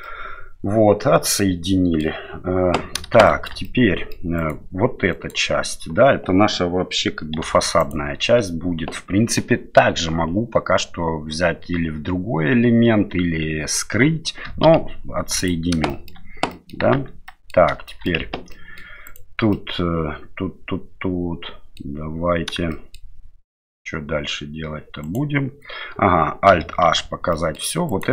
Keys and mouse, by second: 0.0-2.0 middle drag, 3.2 shift+middle click, 3.6 middle click, 4.4 right click, 5.2 right click, 7.4 3, 7.8 right click, 14.7 p, 15.9 middle click, 16.5 middle click, 16.9 Tab, 17.3 middle click, 17.9 middle click, 18.2 Tab, 18.5 middle click, 19.1 right click, 19.5-22.1 middle drag, 22.7 shift+middle click, 25.0 right click, 26.9 alt+h, 27.4 middle click, 27.9 right click.